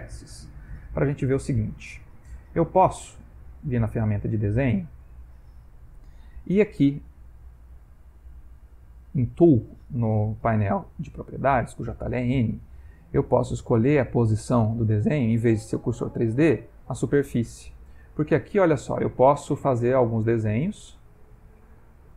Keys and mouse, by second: 0.5 ctrl+middle click, 2.1 Tab, 3.6 click, 8.0 click, 10.5 n, 10.8 n, 11.2 n, 11.5 n, 15.7 click, 18.6 click, 20.4 ctrl+middle click, 21.4 shift+middle click.